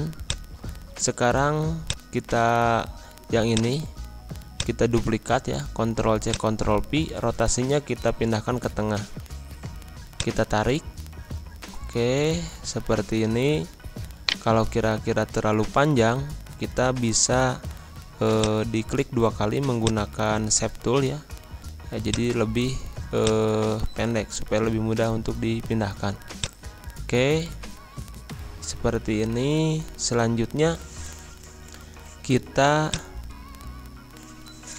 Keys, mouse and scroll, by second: 2.3 scroll up 1, 3.5-7.8 drag, 7.8 scroll down 1, 10.1-14.2 drag, 14.2 right click, 14.8 scroll up 1, 15.8 scroll down 1, 16.8-17.8 scroll up 1, 17.8-18.3 scroll down 1, 18.3-21.0 drag, 21.0-21.7 scroll up 1, 22.0-25.5 drag, 25.5 scroll up 1, 26.3-29.5 drag, 29.5 scroll up 1, 32.8 click, 33.6-34.0 scroll down 1.